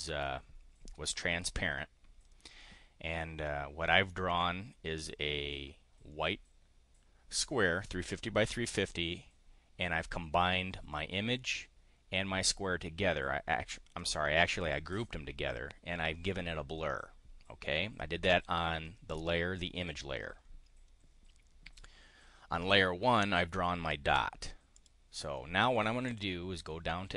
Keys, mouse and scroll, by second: 23.8 click, 24.5 click, 26.1 click.